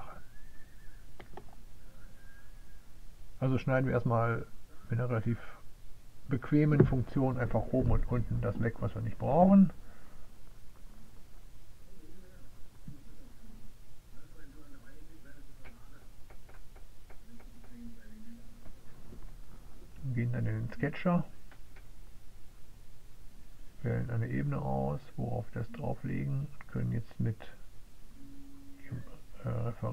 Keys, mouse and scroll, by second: 3.2 click, 6.0 click, 6.8 click, 7.9 click, 9.1 middle click, 10.8 click, 11.8 click, 14.7 click, 15.4 click, 17.5 click, 18.3 click, 20.1 click, 20.3 click, 22.2 click, 23.6 click, 25.1 click, 26.3 click, 27.8 click, 28.5 right click.